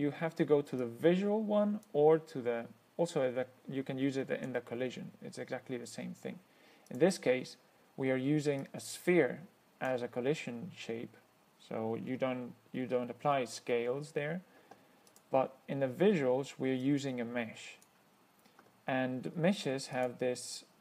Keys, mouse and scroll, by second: 1.1-2.3 drag, 3.4-4.9 drag, 7.2 click, 8.9-10.3 drag, 15.4 click, 17.1 click, 20.2 click.